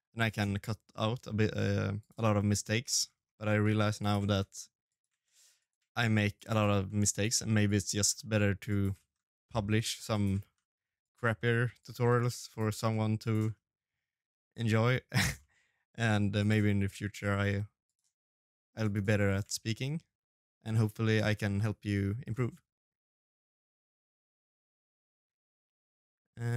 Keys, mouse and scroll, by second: 3.3 middle click, 3.9 scroll up 3, 4.1 middle click, 4.6 shift+d, 5.3 middle click, 6.8 click, 7.6 shift+middle click, 7.9-8.9 scroll down 3, 8.3 g, 9.2 shift+d, 10.6 shift+d, 11.0-18.4 shift+d, 18.4 middle click, 19.6 shift+d, 20.2 middle click, 20.8 g, 21.5 middle click, 22.2 shift+d, 23.4 click, 23.7 shift+d, 24.9 shift+d, 26.1 middle click, 26.1 shift+d.